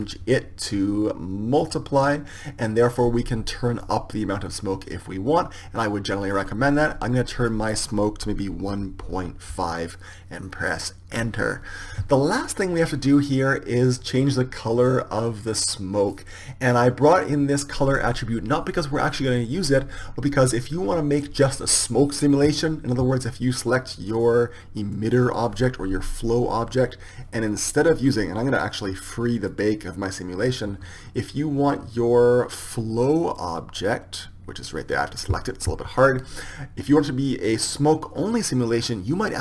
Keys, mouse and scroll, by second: 1.2-3.2 drag, 4.5-6.4 drag, 8.0-9.9 drag, 15.7-20.0 drag, 25.1-30.5 right drag, 30.5-33.8 drag, 34.5-38.1 right drag, 38.1-39.4 drag.